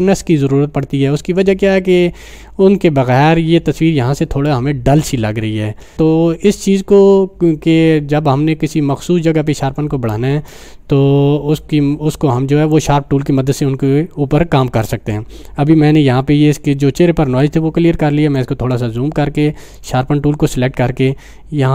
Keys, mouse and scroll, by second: 12.7 click, 13.5 click, 17.4-18.3 drag.